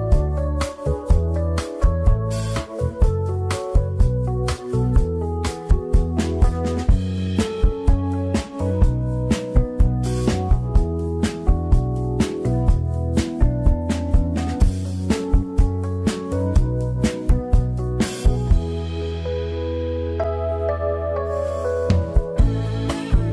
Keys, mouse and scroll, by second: 1.8-3.2 drag, 3.2-5.2 scroll up 2, 5.2-7.6 shift+middle drag, 7.6 click, 13.4 scroll down 3, 14.2 a, 14.9 a, 15.9-17.8 scroll up 1, 17.8 click, 21.5-21.9 scroll up 2, 21.9-23.1 shift+middle drag, 23.1-23.3 drag.